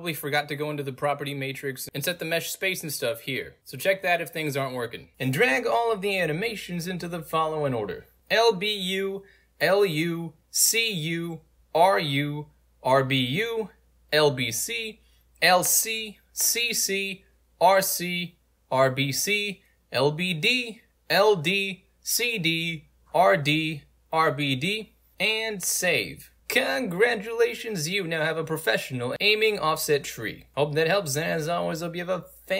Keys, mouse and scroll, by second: 0.0-0.4 right drag, 1.3 click, 2.4 click, 3.0 ctrl+space, 3.1 click, 3.4 click, 4.9 click, 5.1 alt+right click, 7.6 ctrl+right click.